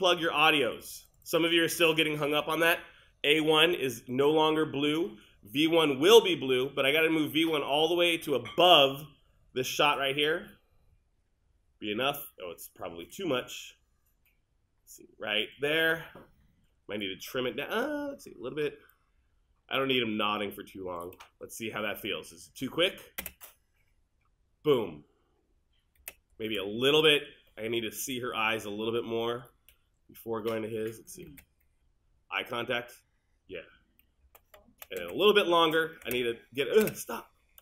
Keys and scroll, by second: 23.2 space, 26.0 space, 31.3 space, 35.0 space.